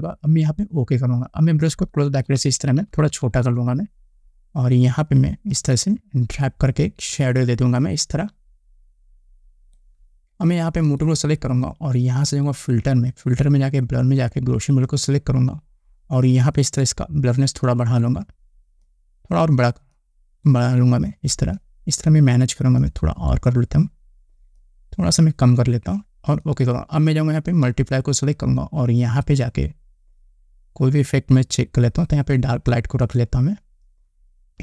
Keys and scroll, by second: 1.9 [, 2.4 [.